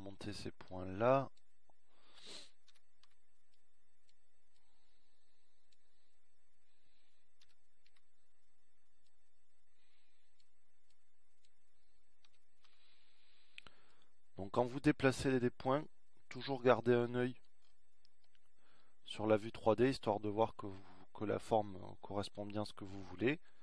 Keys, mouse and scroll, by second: 0.7 click, 2.3-5.8 drag, 6.7 a, 7.0 b, 11.4 a, 11.9 b, 16.4 a, 16.7 b, 21.0-23.6 middle drag.